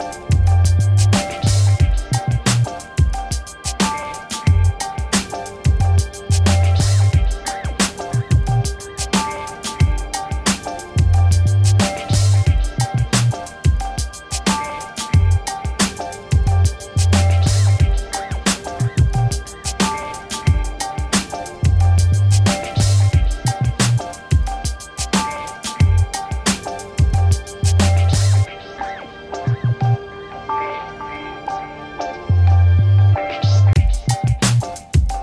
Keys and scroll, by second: 31.2 ctrl+z.